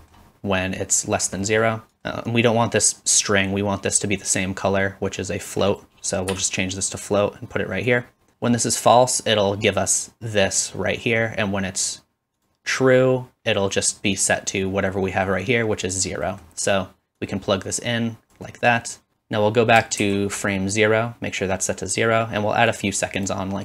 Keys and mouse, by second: 0.1-1.1 middle drag, 4.0-12.4 drag, 12.4-17.2 middle drag, 17.2-23.6 drag, 19.1 shift+Left, 20.1 shift+Left.